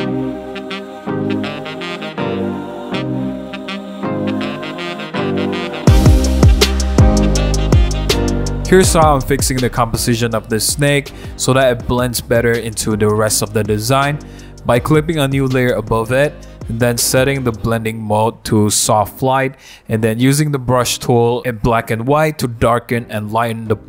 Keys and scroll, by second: 0.1 super+z, 0.5 super+z, 0.9 super+z, 1.5 super+d, 1.6 super+0, 1.6 super+-, 1.7-3.5 typing, 1.8 super+1, 2.9 super+1, 3.5 super+d, 3.5 super+0, 3.5 super+-, 3.7 super+-, 3.7 super+1, 3.9 super+0, 3.9 super+-, 4.1 super+-, 4.4 super+0, 4.5-6.4 typing, 8.2 x, 8.8 super+z, 11.1 super+z, 14.0 x, 16.5 super+z, 18.7-19.2 typing, 22.0 x.